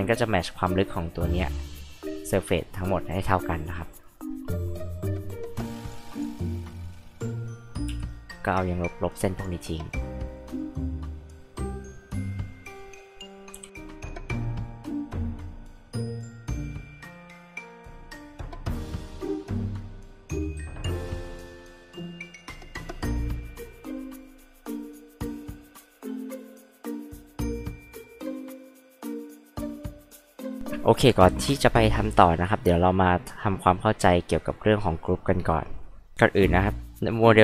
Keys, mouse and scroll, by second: 4.0 click, 4.8 click, 5.5 click, 5.8 click, 6.1 click, 6.4 click, 6.7 click, 7.1 click, 8.2 click, 9.1 click, 9.9 click, 10.3 click, 11.7 click, 12.6 click, 13.0 click, 13.7 click, 14.0 click, 14.4 r, 14.5 click, 14.7 Escape, 14.8 click, 15.3 click, 15.9 p, 16.0 click, 16.1 click, 16.5 click, 16.6 click, 17.0 click, 17.5 click, 18.1 click, 19.0 click, 19.1 click, 19.3 click, 19.4 click, 20.4 click, 21.1 click, 21.2 click, 21.4 click, 21.5 click, 21.8 e, 21.9 click, 22.2 click, 22.6 click, 23.1 click, 23.3 click, 25.2 click, 26.1 click, 26.6 click, 27.1 click, 27.6 click, 28.5 click, 28.7 p, 28.8 click, 29.8 h, 29.8 click, 33.1 scroll up 2, 36.1 click, 36.8 scroll down 2, 36.9 scroll up 2, 37.2 click.